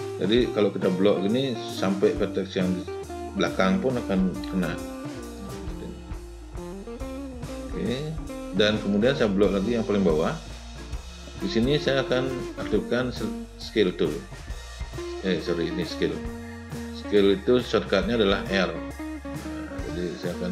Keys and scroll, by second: 4.3 w, 17.4 r.